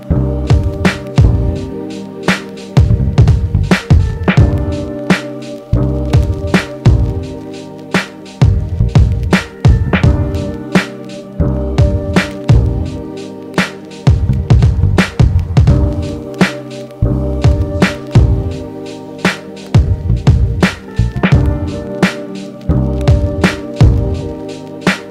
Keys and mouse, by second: 0.1 w, 1.7-2.4 alt+middle drag, 5.0 ctrl+Tab, 7.8 g, 9.8-11.0 middle drag, 11.0-13.8 drag, 13.8-14.2 middle drag, 14.2 click, 14.2 middle click, 14.9-18.1 drag, 18.1-19.8 middle drag, 19.1 n, 19.8-22.6 drag, 22.2 f, 22.6 middle click, 22.8-25.1 drag.